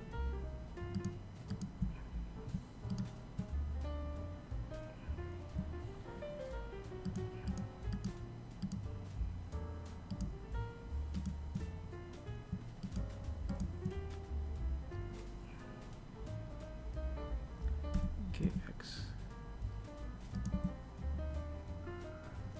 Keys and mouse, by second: 1.1 shift+right click, 5.3 shift+right click, 5.7 shift+right click, 6.1 shift+right click, 6.9 shift+right click, 8.3 shift+right click, 9.4 shift+right click, 11.0 shift+right click, 11.7 shift+right click, 16.1 g, 18.7 a, 22.2 Tab.